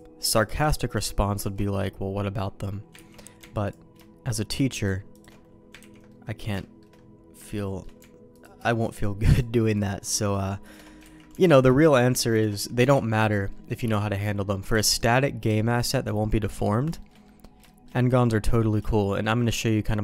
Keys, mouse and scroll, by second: 0.8 alt+shift+click, 1.3 alt+shift+click, 2.9 ctrl+x, 3.6 alt+click, 5.7 ctrl+x, 6.0 middle click, 6.5 shift+middle click, 7.4 shift+middle click, 8.3 alt+click, 9.2 alt+shift+click, 9.7 alt+shift+click, 10.6 alt+shift+click, 11.0 ctrl+x, 12.3 alt+shift+click, 13.0 ctrl+x, 13.4 middle click, 14.2 middle click, 15.2 shift+middle click, 16.4 middle click, 16.9 shift+middle click, 17.2 middle click, 17.6 shift+middle click, 18.3 middle click, 18.8 shift+middle click, 19.6 middle click.